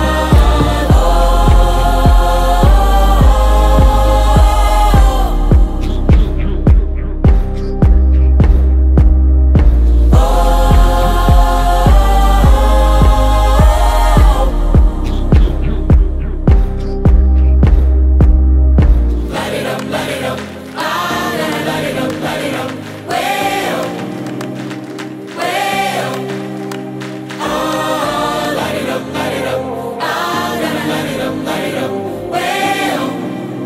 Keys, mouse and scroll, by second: 1.8-3.7 drag, 8.1-11.3 drag, 27.5 click, 30.3 click.